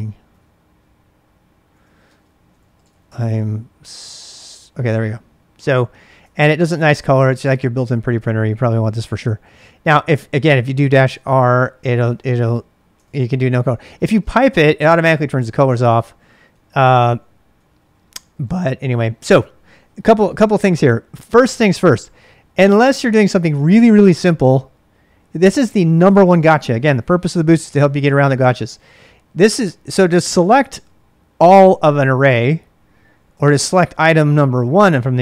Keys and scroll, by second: 0.0-0.6 typing, 0.6 Tab, 1.7-4.2 typing, 6.2 ctrl+[, 6.4 k, 10.4-11.9 typing, 12.0 Return, 13.0 ctrl+[, 13.1-15.1 typing, 16.5-19.3 typing, 25.4 i, 28.3-29.2 typing, 33.1-34.5 typing.